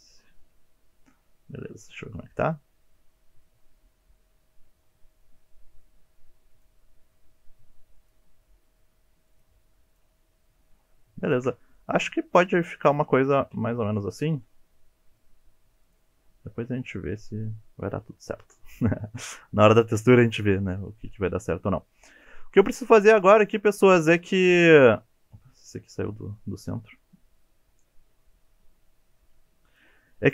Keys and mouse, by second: 0.0 click, 1.4 alt+z, 1.9 click, 3.4-5.8 middle drag, 6.6 click, 7.1 g, 8.0 click, 8.7 g, 9.3 click, 10.2-10.5 middle drag, 11.3 shift+click, 11.6 middle click, 12.7 middle click, 13.4 KP_1, 14.4 s, 15.9 click, 20.6-23.4 middle drag, 23.4 click, 24.2 KP_1, 25.2 g, 29.7 click.